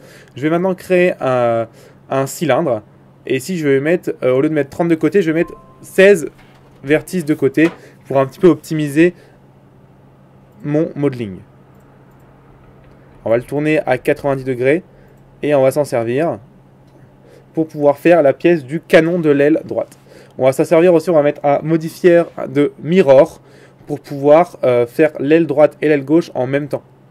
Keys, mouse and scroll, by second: 1.4 shift+a, 7.1 click, 9.3 r, 12.2 ctrl+z, 12.8 r, 15.5 Tab, 16.3 s, 19.1 g, 22.5 middle click.